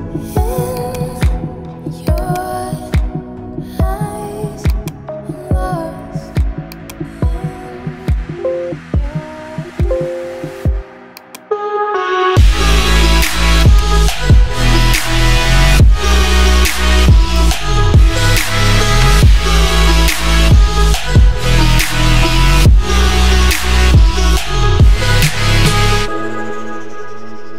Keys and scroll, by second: 2.7-3.6 typing, 8.2 ], 16.3 [.